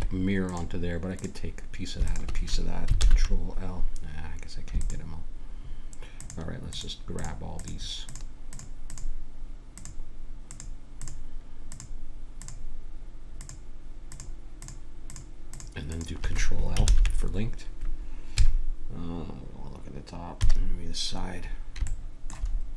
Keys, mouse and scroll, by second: 3.0 ctrl+l, 3.7 click, 4.8-17.5 drag, 16.8 ctrl+l, 18.3 KP_7, 20.4 KP_3, 22.2-22.7 middle drag.